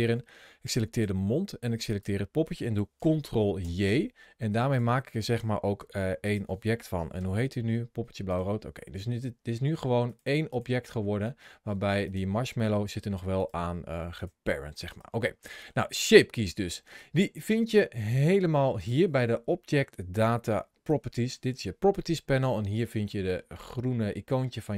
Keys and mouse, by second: 0.7 shift+click, 1.7 shift+click, 3.4 ctrl+j, 4.5 click, 5.6 g, 6.0 click, 7.0 F2, 9.9 click, 10.3 click, 12.6 g, 13.2 click, 14.1 g, 14.7 right click, 15.3 middle click, 18.6 click, 20.5 ctrl+shift+a.